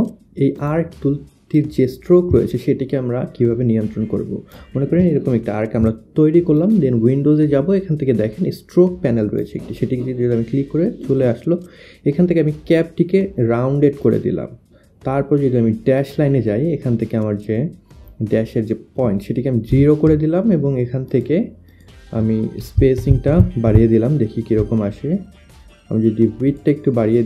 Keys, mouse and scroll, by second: 0.6 click, 2.3 shift+click, 2.6 shift+click, 3.6 shift+click, 6.6 click, 9.2 click, 16.1 click, 19.9 0, 21.1 click, 21.9 click, 22.9 Up, 24.3 click, 24.5 Up, 25.8 Up, 26.5 click.